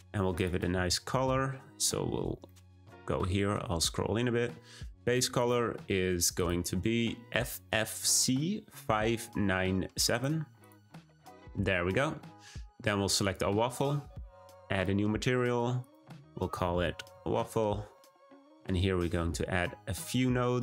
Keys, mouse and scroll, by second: 13.3 click, 14.7-15.5 drag, 15.8-17.3 drag, 17.3 f, 18.9-19.9 scroll down 2.